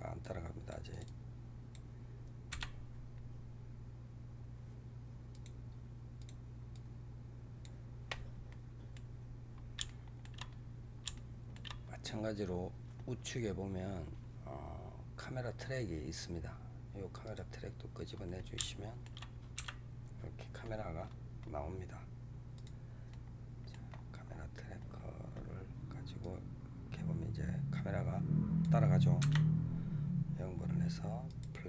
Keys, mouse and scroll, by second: 0.1 drag, 0.9-2.4 drag, 2.4 KP_0, 5.2 click, 6.1 click, 6.6-8.4 drag, 8.4-9.0 middle drag, 9.0-9.8 scroll up 7, 9.8-10.3 shift+middle drag, 10.3-11.0 scroll up 6, 11.0-13.9 shift+middle drag, 13.9-15.3 scroll down 4, 15.3-17.0 scroll down 1, 17.3 click, 18.0-18.5 scroll up 3, 18.5 shift+middle click, 19.5 KP_0, 20.9-21.3 scroll up 5, 22.4 click, 23.0 middle click, 23.8-24.2 scroll down 4, 24.7 scroll down 6, 26.1-29.1 drag, 29.1 KP_0, 31.2 click.